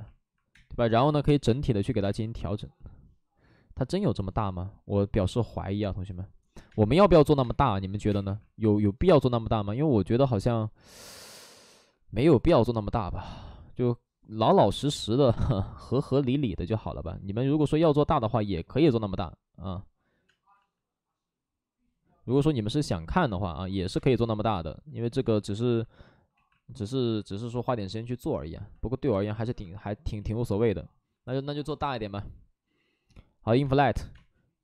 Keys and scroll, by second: 0.4 alt+s, 0.4 space, 0.7 2, 1.6 space, 1.6 2, 6.6-8.2 typing, 7.0 alt+s, 11.7 alt+s, 11.7 2, 13.4 ctrl+z, 14.6 space, 20.2 space, 20.5 ctrl+z, 23.9 space, 25.2 space, 26.3 ctrl+z, 31.0 b, 31.4 i, 33.6 space, 34.0 space.